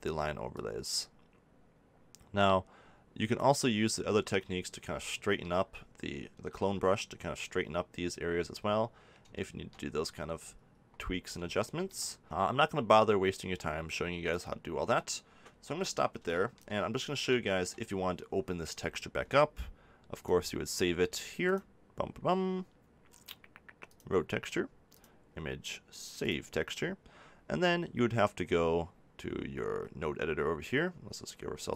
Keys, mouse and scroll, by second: 4.7 middle click, 12.2 f, 23.3 scroll down 1, 24.9-25.9 drag, 31.7 click.